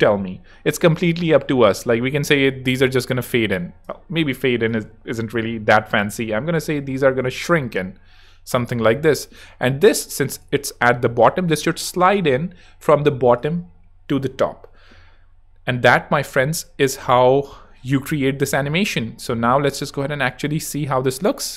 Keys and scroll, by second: 4.1 super+z, 20.5 space.